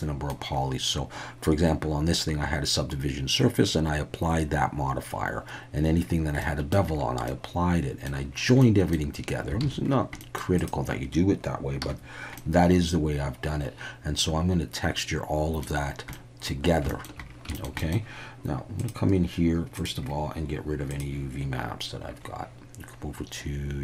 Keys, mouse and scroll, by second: 6.4 middle click, 7.3-8.1 middle drag, 8.6-9.1 middle drag, 9.6 alt+a, 10.2 middle click, 10.6 click, 11.8 /, 12.4-15.6 middle drag, 16.1-16.5 middle drag, 16.9 shift+middle drag, 17.5 shift+middle drag, 17.8 middle click, 18.8 click, 19.7 click, 20.9 click.